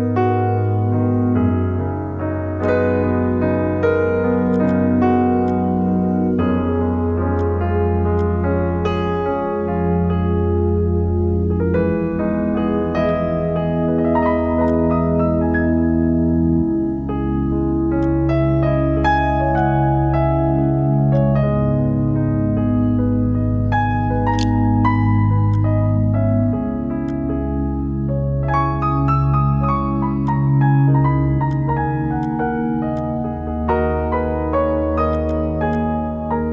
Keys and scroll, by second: 22.9-25.2 typing.